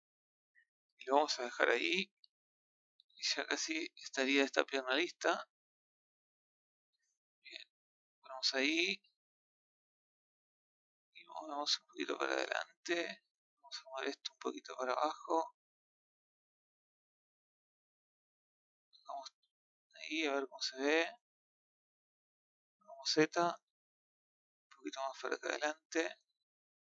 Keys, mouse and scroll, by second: 0.0-2.1 middle drag, 2.1 KP_3, 3.9-4.2 scroll up 2, 4.5 scroll down 2, 4.8-6.0 middle drag, 6.0 click, 7.4 KP_1, 10.2 click, 11.4 click, 13.0-14.1 middle drag, 14.1 click, 15.2 middle click, 16.2 click, 17.4 click, 19.2 KP_1, 21.8 click, 24.4 click, 26.6 middle click.